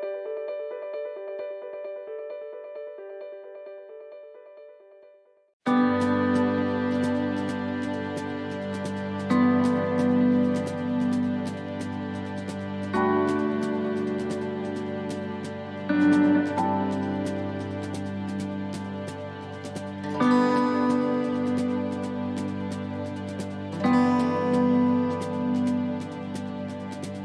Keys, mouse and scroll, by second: 0.6 middle click, 1.1-1.5 scroll up 2, 2.0 right click, 2.6 shift+right click, 3.6 shift+right click, 3.6 right click, 4.1 right click, 4.8 right click, 5.5 shift+right click, 7.2 shift+right click, 7.2 middle click, 8.2 shift+right click, 9.8 shift+right click, 10.2 shift+right click, 10.5 shift+middle click, 11.4 shift+right click, 12.0 shift+right click, 12.3 shift+middle click, 13.4 shift+right click, 15.0 shift+right click, 16.1 shift+right click, 17.4 shift+right click, 17.4 middle click, 18.6 shift+right click, 19.3 shift+right click, 19.7 shift+right click, 20.4 shift+right click, 21.6 shift+right click, 21.6 middle click, 23.0 shift+right click, 23.4 middle click, 24.4 shift+middle click, 25.1 middle click.